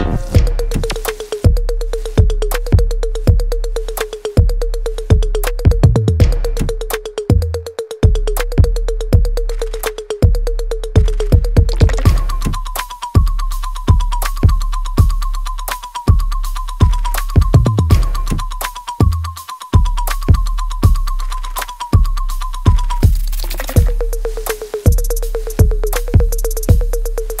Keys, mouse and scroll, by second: 7.8 right click, 8.3 click, 8.6 alt+click, 9.6 click, 10.3 space, 11.3 alt+middle click, 11.9 alt+right click, 13.5-18.1 drag, 20.7 w, 21.1 click, 21.9 e, 22.3 click, 23.4 r, 23.8 click, 24.6 w, 25.0 click, 25.5 r, 26.0-27.4 drag.